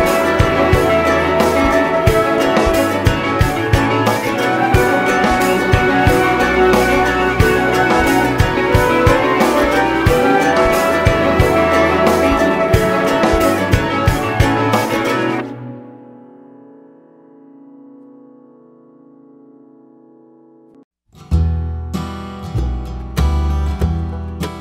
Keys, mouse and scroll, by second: 1.7 click, 3.3 `, 4.1-7.1 drag, 5.5 `, 7.6 click, 8.6 click, 12.5 click, 14.4 click, 16.0 `, 16.3-17.9 scroll up 2, 17.9-20.2 drag, 19.1 `, 20.8 `, 21.9-24.6 drag.